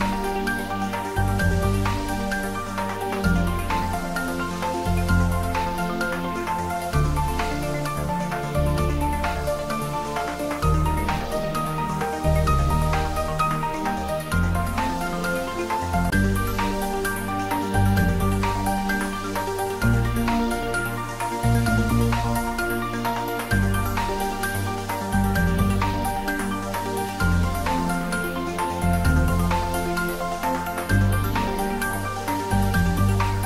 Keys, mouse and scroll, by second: 3.1-3.7 scroll up 1, 4.0-4.6 middle drag, 5.6 scroll up 1, 6.5 click, 7.9 2, 8.7 click, 11.6 shift+click, 12.4 x, 13.9 click, 14.8-15.2 scroll down 1, 15.2-16.4 middle click, 16.4 ctrl+z, 16.8-17.4 scroll up 1, 19.2-20.1 middle click, 19.7 click, 21.9 alt+shift+click, 26.0 scroll down 1, 26.4 middle click, 27.3 scroll up 1, 27.7-28.4 middle click, 28.7-30.4 scroll down 1, 30.4 e, 31.6 click, 31.8 s.